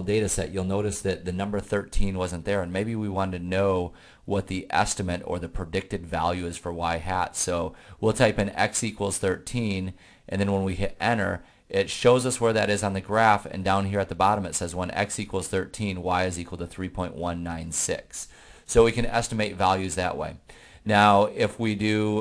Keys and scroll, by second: 5.1 1, 5.4 3, 10.6 Return.